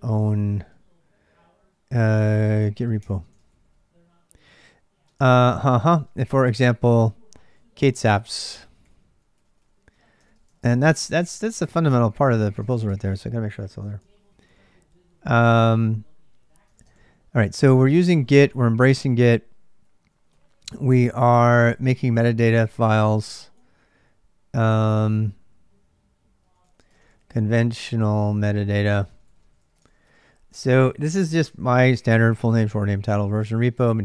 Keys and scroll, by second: 0.0-0.8 typing, 2.3-14.2 typing, 15.5 k, 15.7 k, 16.5 ctrl+[, 16.9-30.5 typing, 32.1 j, 32.8 j.